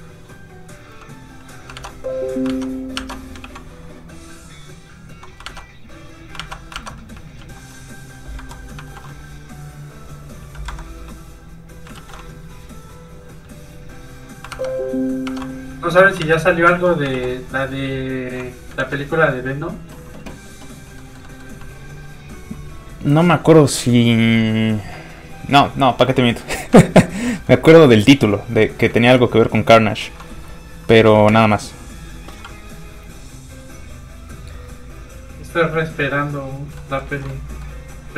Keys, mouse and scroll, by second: 0.8 super+s, 0.9 click, 1.7 alt+Tab, 3.3 ctrl+Tab, 3.4 ctrl+v, 3.9 v, 4.0 click, 5.4 alt+Tab, 7.4 shift+super+s, 8.3 super+Escape, 8.8 shift+super+s, 10.6 super+s, 10.7 Escape, 11.9 shift+super+s, 13.3 shift+s, 13.4 click, 14.5 alt+Tab, 15.6 ctrl+Tab, 16.2 ctrl+alt+Tab, 16.7 alt+click, 17.1 ctrl+alt+v, 17.6 click, 18.8 ctrl+s, 21.0 middle click, 26.8 shift+middle click, 27.0 middle click, 27.1 middle click, 28.8 shift+middle click, 28.9 middle click, 29.4 shift+middle click, 29.7 middle click, 29.8 middle click, 31.2 ctrl+shift+space, 32.2 shift+click, 33.5 click, 34.4 click, 36.7 middle click, 37.1 ctrl+z, 37.3 middle click, 37.7 f, 37.9 click.